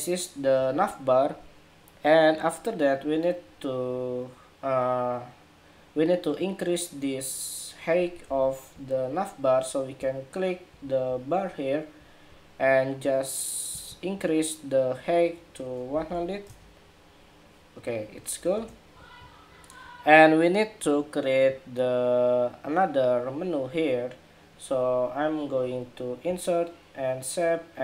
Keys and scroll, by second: 8.0 super+=.